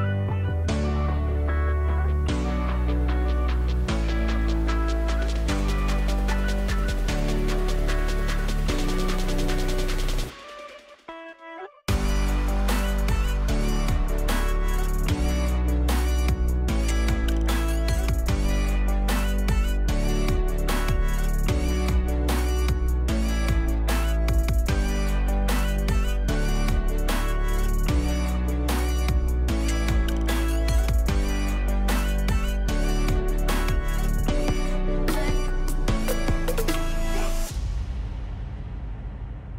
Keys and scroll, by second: 3.2 space, 3.8 space, 4.1 space, 5.4 space, 16.0 space, 21.1 ctrl+x, 21.6 ctrl+v, 23.2 ctrl+t, 33.9 ctrl+t, 39.0 ctrl+t.